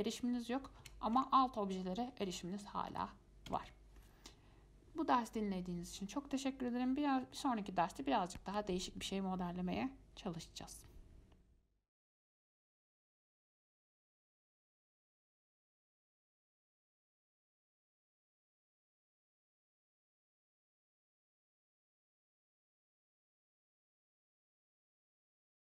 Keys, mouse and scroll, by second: 1.0 Tab, 1.4 Tab, 2.2 scroll down 5, 2.4-3.7 middle drag, 3.7 Tab.